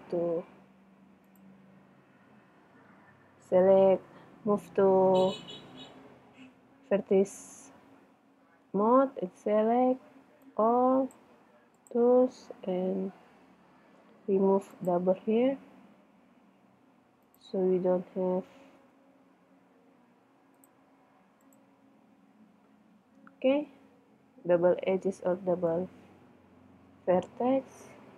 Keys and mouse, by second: 0.2 ctrl+Tab, 3.0 a, 3.6 a, 10.4-12.6 drag, 12.6-13.7 middle drag, 14.7 middle click, 14.8 right click, 16.2-17.2 middle drag, 18.8 middle click, 19.1 ctrl+Tab, 21.4 click, 23.6 Tab, 27.9 middle click.